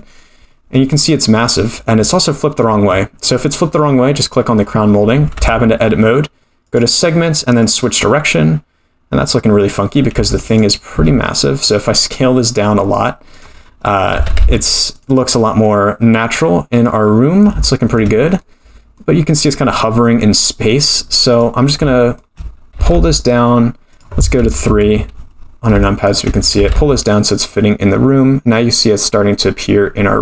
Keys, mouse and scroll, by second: 0.8-1.3 scroll down 3, 1.3 middle click, 1.3 scroll down 1, 4.2 click, 5.3 Tab, 6.6-8.0 drag, 10.1 Tab, 10.5 click, 10.9 s, 13.6-14.1 scroll up 3, 14.4 g, 15.3-15.7 scroll up 2, 15.7-17.0 middle drag, 17.1 scroll up 1, 17.6-18.0 shift+middle drag, 18.4-19.3 middle drag, 19.3-19.7 scroll down 2, 19.7-21.3 middle drag, 21.3 click, 21.9-22.3 shift+middle drag, 22.8 g, 24.7 KP_3, 25.4-25.7 scroll up 4, 25.8-26.2 shift+middle drag, 26.6 g.